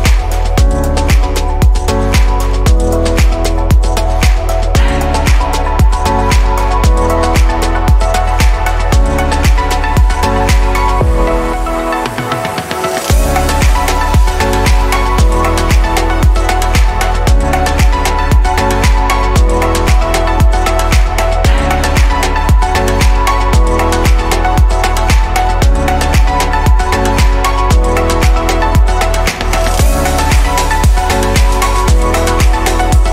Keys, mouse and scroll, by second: 0.0 Delete, 1.5 click, 4.6 f, 5.3-7.1 middle drag, 7.1 click, 7.6-9.0 shift+middle drag, 9.0 /, 11.4 click, 13.6-14.6 scroll up 2, 14.6 e, 26.7-28.9 middle drag, 28.9 click, 30.5-33.1 middle drag.